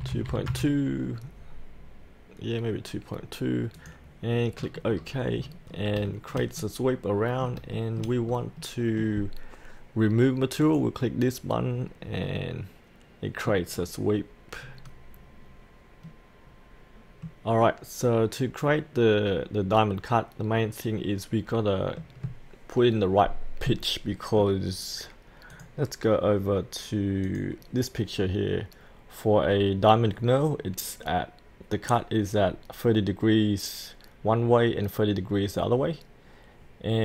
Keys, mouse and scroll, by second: 0.1 KP_Decimal, 0.3 KP_2, 3.8 click, 4.7 scroll up 1, 5.8 scroll up 1, 6.1 shift+middle click, 7.7 shift+middle click, 8.2-8.6 scroll down 1, 8.6 middle click, 10.6 click, 11.7 scroll up 1, 12.3 middle click, 13.7-16.0 scroll down 1, 16.0-25.2 middle drag, 25.5 click.